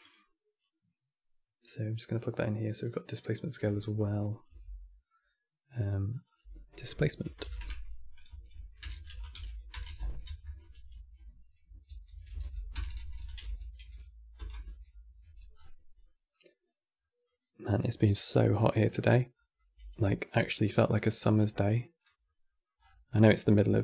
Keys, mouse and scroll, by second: 0.4-1.3 middle drag, 1.3 click, 3.2 click, 4.2 n, 5.8 click, 6.0-8.6 drag, 8.6 BackSpace, 9.5 BackSpace, 10.1 BackSpace, 12.6 BackSpace, 12.7 BackSpace, 14.9 n, 15.2 scroll down 6, 15.7-17.4 middle drag, 17.4-18.7 scroll up 11, 19.0 drag, 19.5 g, 20.9-21.2 scroll down 7, 21.2-22.5 middle drag, 22.5 scroll up 10, 23.0-23.8 middle drag.